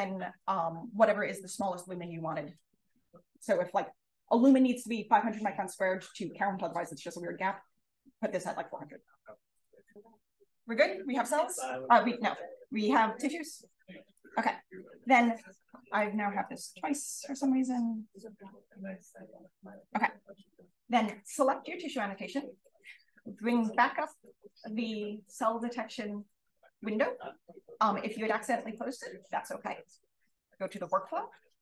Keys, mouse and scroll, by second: 15.9-16.3 drag, 16.7 click, 17.3 click, 17.7 click, 19.6-21.4 drag, 30.6-31.6 drag.